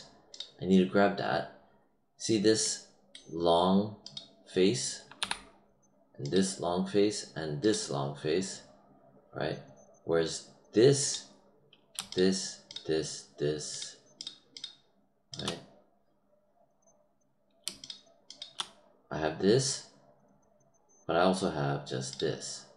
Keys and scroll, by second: 5.1 q.